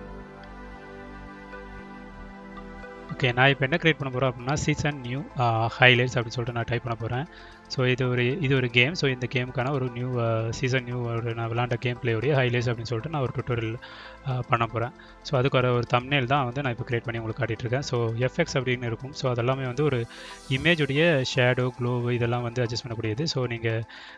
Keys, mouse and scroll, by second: 0.7 click, 1.4 click, 3.7 space, 5.0-6.0 typing, 9.2 shift+g, 9.9 shift+s, 11.3 click, 11.8 click, 11.9 click, 12.2 click, 13.3 click, 13.7 ctrl+x, 14.0 click, 14.3 click, 15.7-17.7 drag, 18.3-18.7 drag, 19.8-23.5 drag, 24.0 drag.